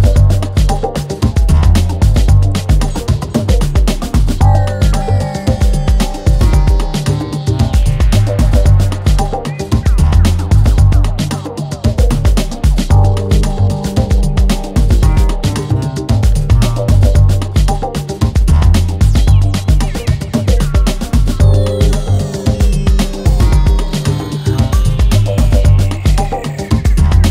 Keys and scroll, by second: 4.0 4, 5.7 F1, 7.0 ctrl+d, 7.1 Escape, 8.9 F1, 13.0 3, 14.5 ctrl+d, 14.5 Escape, 15.6 Escape, 21.6 4.